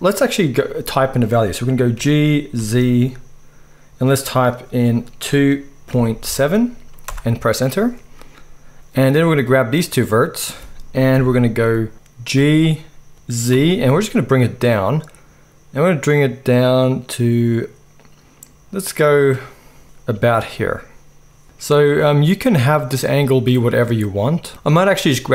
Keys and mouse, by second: 1.9 g, 11.1 KP_1, 12.4 g, 19.8-21.4 middle drag, 21.4-25.3 drag.